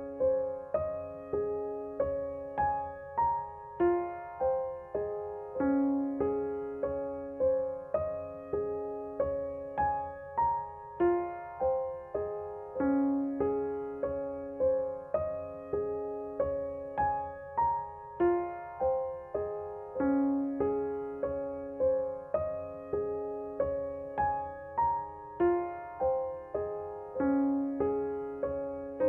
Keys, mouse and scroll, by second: 2.1-10.2 drag, 12.8-18.5 drag, 18.9-21.8 drag, 21.7-26.6 drag, 27.5 space, 27.8 click, 27.9 click, 28.0 space.